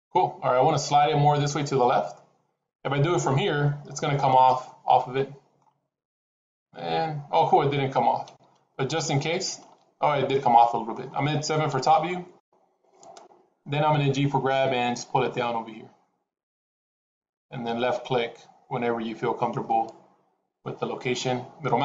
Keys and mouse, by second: 3.1 g, 5.0 middle click, 6.1-7.4 middle drag, 8.2 ctrl+z, 8.8-9.5 middle drag, 10.4-10.8 middle drag, 11.6 KP_7, 14.4 g, 20.5-21.8 middle drag.